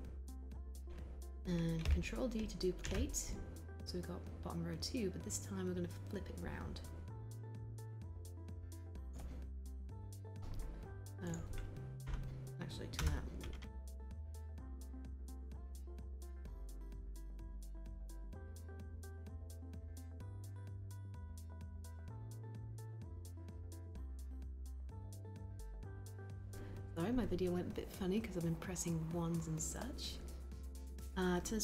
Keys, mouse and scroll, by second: 2.7 ctrl+d, 17.2 w.